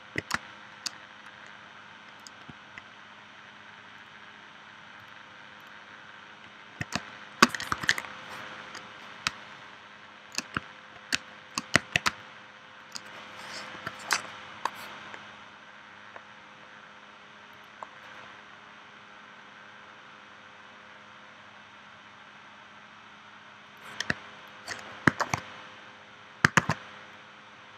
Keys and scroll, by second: 0.3 space, 6.9 space, 7.7 super+s, 9.3 space, 11.2 space, 12.0 space, 13.8 p, 25.2 shift+v, 26.6 shift+c.